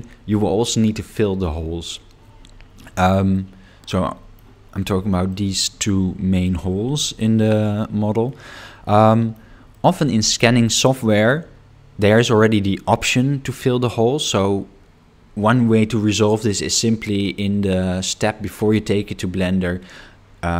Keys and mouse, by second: 3.4-4.4 middle drag, 5.3 shift+middle click, 8.3-9.3 middle drag, 9.7 shift+middle click.